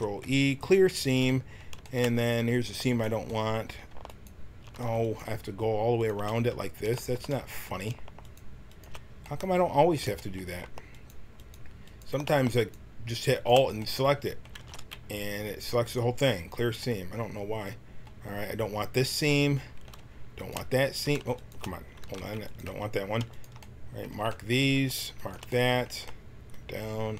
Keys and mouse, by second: 0.9 a, 2.1-7.0 drag, 7.4 middle click, 9.4 click, 14.4 click, 14.5 ctrl+e, 18.9 click, 19.4-21.3 drag, 21.9 ctrl+e, 22.6 a, 25.4 click, 25.6 click.